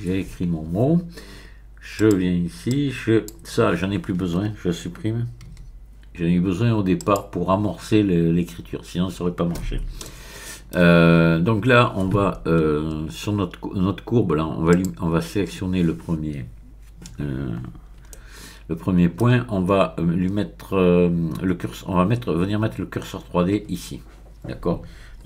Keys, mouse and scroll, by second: 2.0 click, 2.7 click, 5.5 x, 7.0 click, 10.0 shift+middle click, 14.7 click, 17.6-18.1 scroll up 2, 18.1-19.3 shift+middle drag.